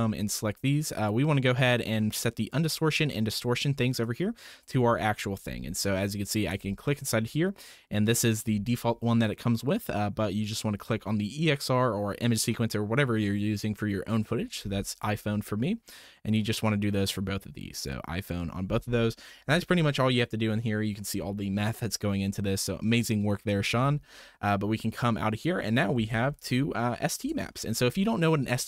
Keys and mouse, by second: 0.9 click, 4.0 click, 18.9-19.3 middle drag, 20.7 middle click, 22.8-23.4 middle drag, 23.7 Tab, 24.4-24.8 drag, 25.4 click, 26.4 ctrl+shift+click, 27.9 click.